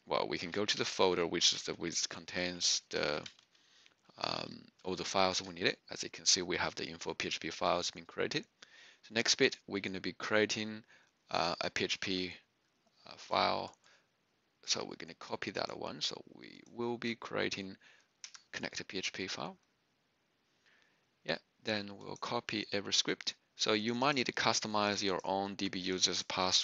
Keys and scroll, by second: 0.0-5.5 typing, 4.2 Return, 18.2 Return.